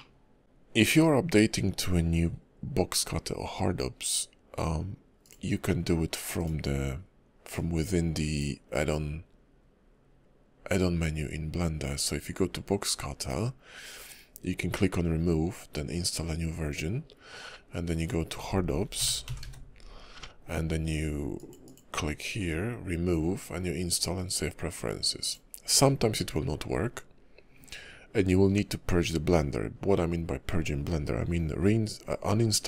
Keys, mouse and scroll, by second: 5.2 click.